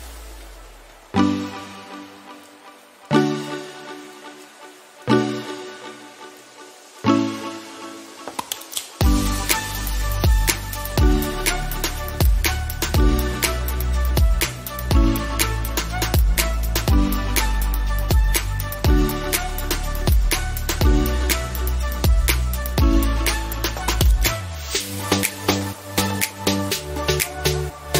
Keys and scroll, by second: 13.2 ctrl+z, 17.7 ctrl+z, 18.3 ctrl+alt+z.